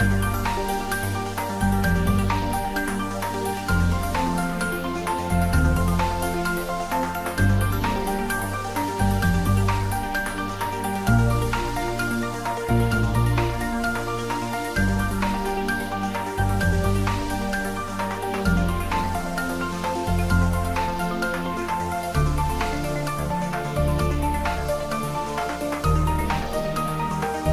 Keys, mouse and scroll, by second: 4.1-5.8 scroll up 1, 5.9 click, 6.6 Tab, 7.2-9.8 middle drag, 9.8 click, 10.4 middle click, 11.0 click, 11.7 Tab, 12.3 click, 14.0 3, 14.3 click, 14.8-16.5 middle drag, 16.5 ctrl+r, 17.4-17.9 scroll up 1, 18.1 click, 19.6-20.7 typing, 24.9 click, 26.6 3, 27.1 click.